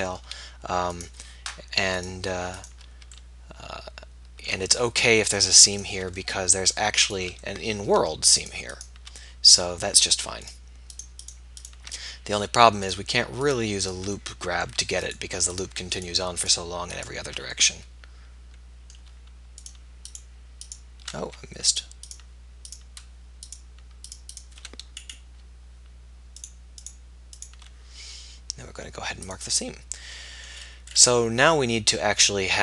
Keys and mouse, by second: 4.4 middle click, 6.6 middle click.